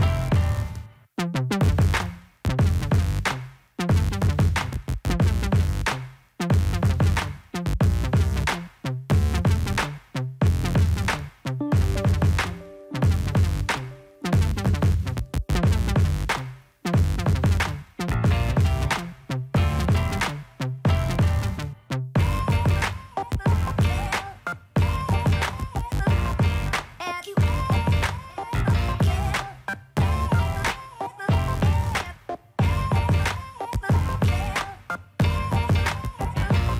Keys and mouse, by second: 0.6 middle click, 1.5 click, 1.9 click, 2.2 drag, 2.5 click, 2.8 middle drag, 3.0 right click, 3.2 middle drag, 3.4 right drag, 4.1 middle click, 4.3 middle click, 4.6 middle click, 4.8 middle drag, 5.9 click, 6.0 middle drag, 6.4 right click, 6.7 click, 7.1 middle click, 7.5 click, 7.7 middle click, 8.2 right click, 8.3 middle click, 9.1 r, 10.8 right click, 11.2 middle click, 11.5 middle click, 12.2 click, 12.3-12.9 middle drag, 13.2 middle click, 13.6 Tab, 14.6 Tab, 15.3 click, 15.9 click, 16.2 click, 16.4 click, 16.6 click, 16.7 click, 17.4 click, 17.8 click, 18.7-20.0 drag, 20.2-20.7 middle drag, 22.3 click, 22.6-23.0 middle drag, 23.3-23.6 middle drag, 23.9 middle drag, 25.1 click, 26.0 right click, 26.2 right click, 26.6 middle drag, 27.0 click, 27.4 right click, 27.7 click, 28.3 middle click, 28.6 middle click, 28.9 right click, 29.0 middle click, 29.3 right click, 30.7 right click, 32.2 middle click, 33.3 ctrl+c, 33.7 click, 34.9 ctrl+v, 34.9 middle click, 35.1 click, 35.9 middle drag, 36.6 ctrl+v.